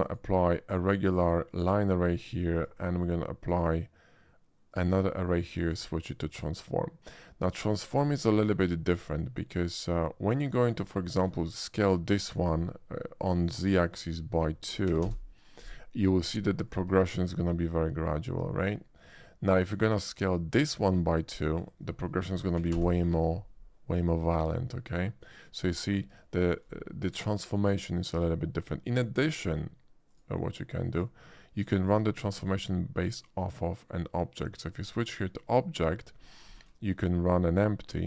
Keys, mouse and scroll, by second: 0.0 shift+click, 1.1 shift+click, 2.6 click, 3.4 click, 4.7 click, 5.6 click, 6.3 click, 7.5-8.4 drag, 8.9 click, 9.5-10.7 drag, 11.1 shift+middle drag, 11.4 shift+middle click, 13.7 click, 14.9 2, 15.0 Return, 16.2-16.7 middle drag, 17.0-17.4 shift+middle drag, 18.8 shift+middle click, 20.1 shift+click, 21.5 click, 22.7 2, 22.8 Return, 24.5-25.1 middle drag, 27.3 shift+click, 28.2-28.6 shift+middle drag, 29.0 shift+middle drag, 30.1 shift+click, 30.9 shift+click, 31.6 shift+middle drag, 32.4 shift+click, 35.4 click, 36.6 shift+a.